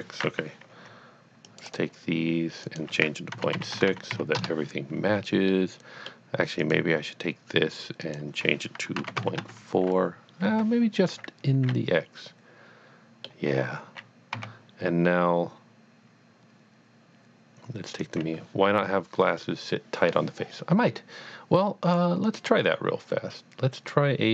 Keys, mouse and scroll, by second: 0.7 c, 1.5 click, 1.6 right click, 2.6 click, 3.3 KP_Decimal, 3.5 KP_6, 3.7 Tab, 3.9 KP_Decimal, 4.1 KP_6, 4.4 KP_Enter, 5.5 middle click, 5.9 middle click, 6.6 click, 8.0 click, 9.0 KP_Decimal, 9.2 KP_4, 9.4 Tab, 9.9 KP_Decimal, 10.5 Escape, 11.7 middle click, 12.1 middle click, 14.3 a, 18.0 a, 18.3 click, 21.8 click, 21.9 click, 22.3 click.